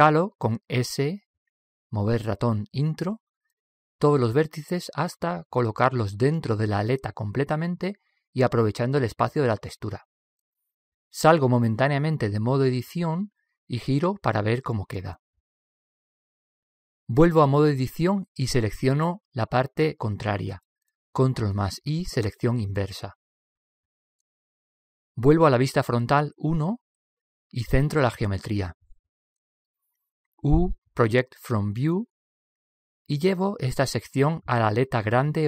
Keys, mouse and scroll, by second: 1.8 s, 12.8 Tab, 15.3 Tab, 16.1-17.9 middle drag, 18.9 Tab, 21.3 ctrl+i, 22.1 ctrl+i, 26.8 KP_1, 28.7-29.8 middle drag, 30.3 middle click, 30.6 middle click, 31.0 u, 31.4 u.